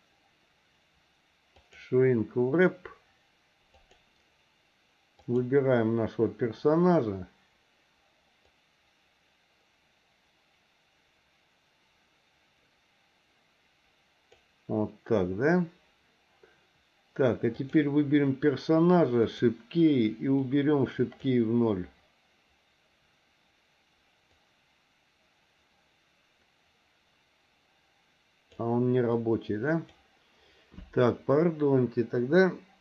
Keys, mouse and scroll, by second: 3.8 click, 8.4-14.3 drag, 17.5 click, 19.2 click, 20.4 click, 24.3-28.5 drag, 29.1 click.